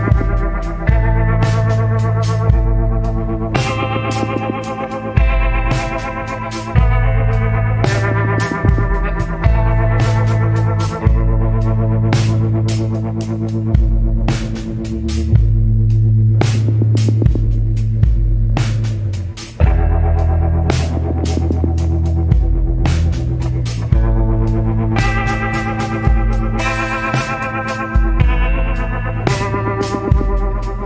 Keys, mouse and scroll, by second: 19.2 scroll up 1.